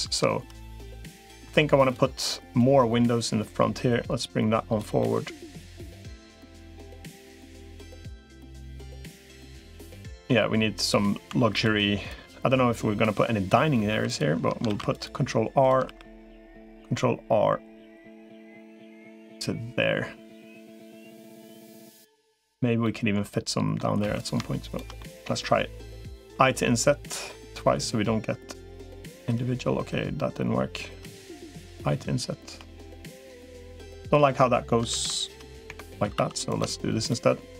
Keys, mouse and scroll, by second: 1.4 2, 2.6-4.6 drag, 4.8 middle click, 6.0 3, 10.6 click, 11.2 2, 12.0-13.6 drag, 13.8 3, 14.6 ctrl+r, 15.6 ctrl+r, 20.7-22.3 middle drag, 22.6 middle click, 24.0 3, 24.8 middle click, 26.2 i, 34.8 ctrl+r, 36.0 2, 36.8 shift+click, 37.4 shift+click.